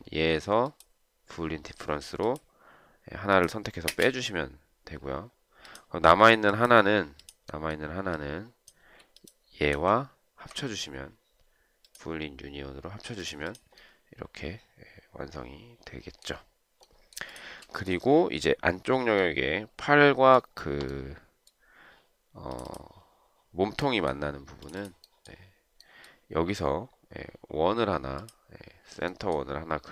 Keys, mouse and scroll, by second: 4.0 space, 9.5 shift+click, 18.0 shift+right click.